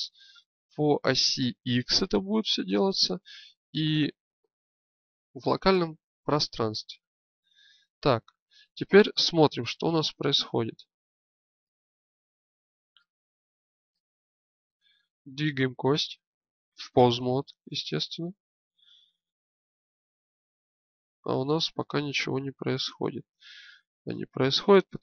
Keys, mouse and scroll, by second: 2.4-7.7 drag, 9.8 shift+space, 17.8-24.4 drag.